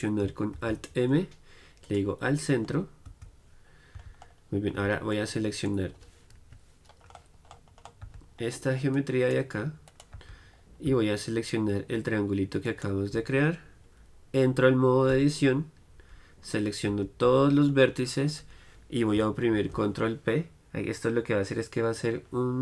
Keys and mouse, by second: 3.2 Tab, 4.0 z, 4.9 z, 6.5 KP_Decimal, 8.1 z, 9.2-10.2 drag, 10.2 z, 10.6-15.2 right drag, 15.2 Tab, 17.0 a, 17.9-20.9 middle drag, 19.7 ctrl+p.